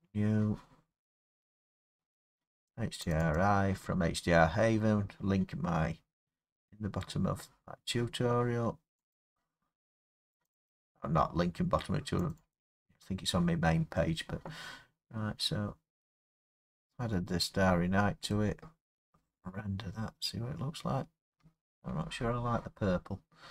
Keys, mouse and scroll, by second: 1.2-2.1 scroll, 3.1 click, 3.4 click, 9.1 click, 10.5 click, 10.7 click, 12.3 click, 12.5 click, 16.7 click, 16.9 middle click, 16.9 middle click, 17.5 middle click, 17.6 middle click, 17.9 middle click, 18.9 F12, 18.9 scroll, 19.8 scroll, 21.8 Escape.